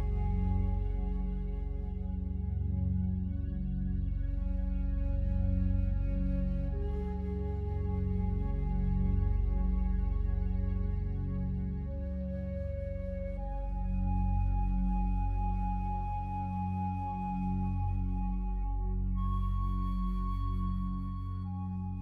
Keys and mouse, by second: 2.7 click, 3.4 click, 5.9 click, 6.6 click, 7.1 click, 7.9 shift+d, 8.3 shift+click, 9.3 click, 11.8 click, 12.6-13.0 typing, 14.2 click, 14.7 click, 15.1-16.2 alt+shift+drag, 16.8 click, 17.8 typing, 18.3 click, 19.1 click, 19.9 ctrl+v, 20.0-20.7 typing, 21.1 click.